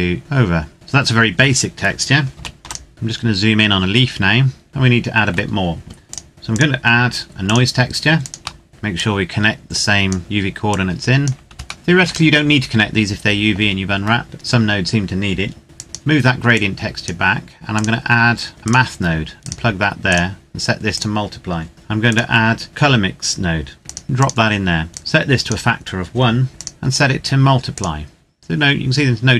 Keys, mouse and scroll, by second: 0.1 click, 0.7 scroll down 1, 0.9-2.3 scroll up 1, 2.3 ctrl+s, 2.6 ctrl+click, 2.9-4.7 scroll up 1, 4.7 scroll down 1, 4.7 shift+middle click, 6.1 click, 8.6 shift+middle click, 8.9 click, 10.9 click, 11.7 shift+middle click, 15.7 click, 23.8 click.